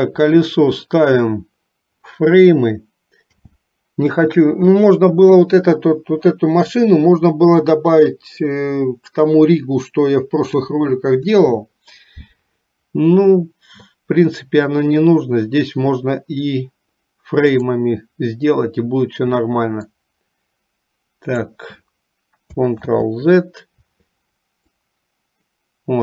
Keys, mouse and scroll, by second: 3.4 n, 17.5 click, 20.1-21.7 drag, 22.9 ctrl+z, 24.8-26.0 drag.